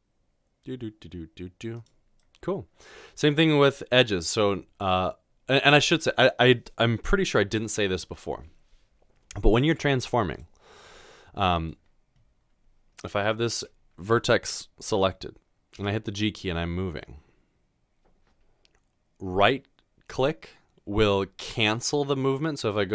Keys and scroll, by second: 0.0 s, 15.8 g.